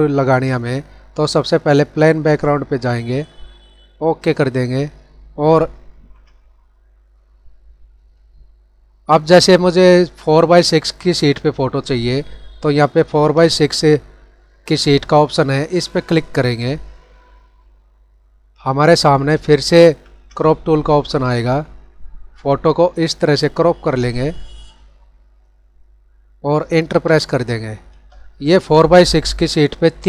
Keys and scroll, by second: 5.8 ctrl+-, 19.3 ctrl+-, 29.9 ctrl+=.